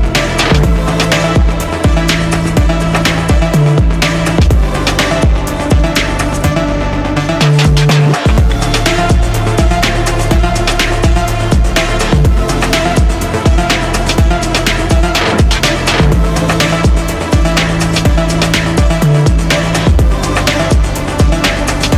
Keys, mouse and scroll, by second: 0.5-1.8 typing, 2.0 Down, 2.6 ctrl+a, 4.0 click, 5.1 click, 5.8 click, 6.0 ctrl+v.